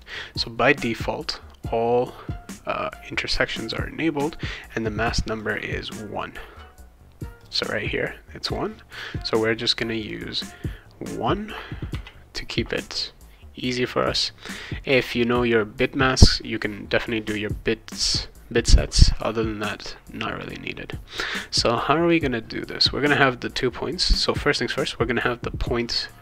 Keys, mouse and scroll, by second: 0.0 click, 4.2 click, 5.4 click, 7.4 click, 8.4 click, 10.0 click, 11.9 1, 14.0 click, 15.0 click, 20.4 click.